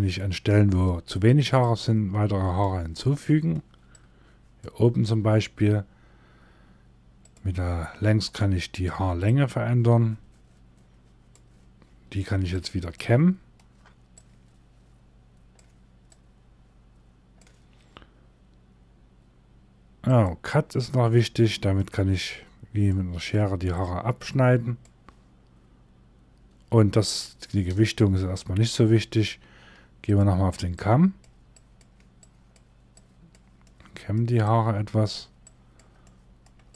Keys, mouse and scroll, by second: 0.6 scroll up 1, 1.1 click, 2.4 middle click, 3.5 click, 7.3 scroll down 1, 7.7 middle click, 8.8 click, 12.4 middle click, 13.6 click, 20.6 middle click, 21.4 scroll up 2, 22.4 middle click, 23.3 click, 33.1 middle click, 34.0 click, 35.5 middle click, 36.3 click.